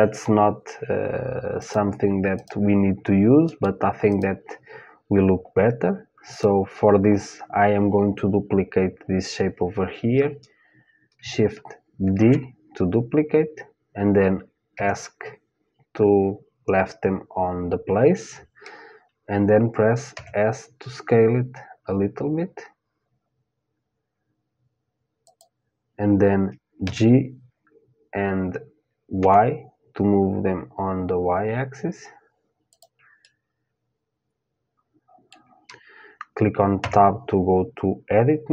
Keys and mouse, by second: 1.2-8.0 drag, 11.8 shift+d, 19.7 s, 26.5 g, 32.8-34.9 middle drag, 36.4 Tab.